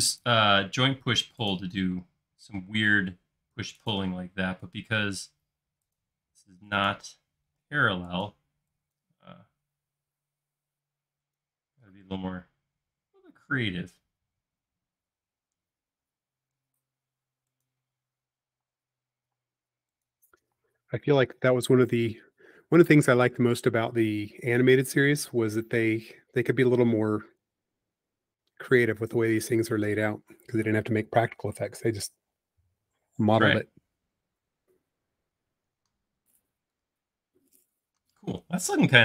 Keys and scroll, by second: 0.5 l, 2.0 l, 4.6 typing, 6.2 typing, 7.5-7.8 typing, 9.3 typing, 17.9 l, 19.4 typing, 20.4 typing, 23.3 alt+l, 27.7-28.4 typing.